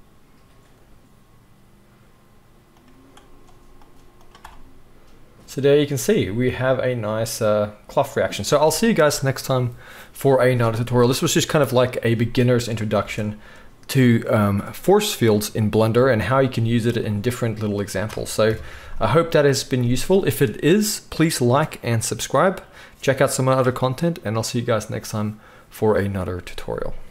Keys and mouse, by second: 1.3-3.9 middle drag, 2.4-3.9 drag, 2.4-27.1 right drag, 8.4 space, 13.0 space, 15.9 space, 18.4 KP_1, 19.0 click.